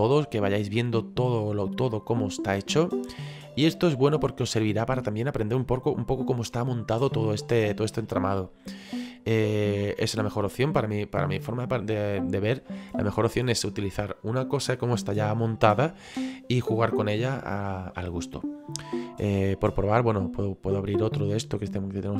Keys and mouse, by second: 0.6 shift+middle click, 3.5 shift+middle click, 8.0 shift+middle click, 20.3 click.